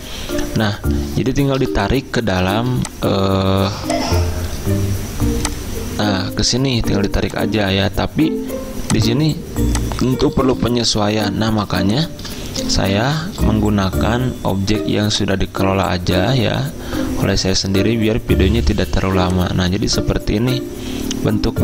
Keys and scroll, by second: 12.9 ctrl+v, 19.1 z.